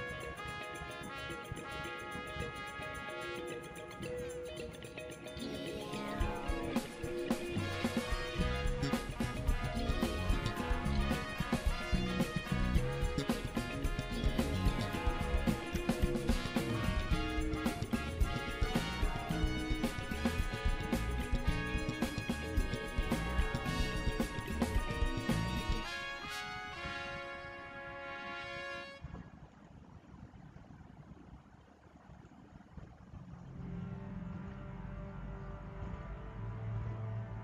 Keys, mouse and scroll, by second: 3.9-15.3 drag, 15.9 space, 16.1 click, 16.5 space, 19.1-29.7 drag, 32.3 click, 32.7 scroll down 1.